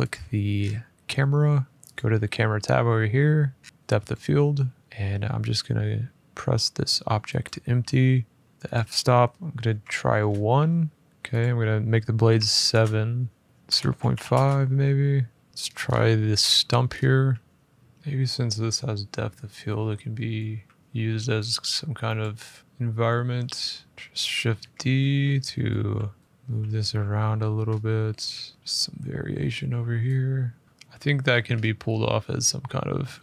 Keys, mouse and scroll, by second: 0.3 scroll down 4, 1.7 click, 3.4-3.9 scroll down 4, 3.9 scroll, 4.0 click, 4.8 click, 8.4 click, 8.5 click, 9.4 1, 9.9 Return, 11.0 scroll, 11.1 click, 12.0-13.9 typing, 13.4 click, 14.4 Return, 15.5 middle click, 15.5-15.9 scroll, 16.3 middle click, 16.3-16.9 scroll down 11, 16.9 g, 17.5 click, 19.9 scroll down 1, 20.2 middle click, 20.2 r, 21.9 click, 23.9 Escape, 23.9 middle click, 25.5 g, 25.7 scroll, 26.2 click, 26.4 scroll, 27.3-28.1 scroll, 28.1 r, 28.6 click, 28.7-29.3 scroll, 29.3 g, 29.7 middle click, 30.6-31.2 scroll down 4, 31.3 middle click, 31.3 scroll up 2, 32.7 middle click.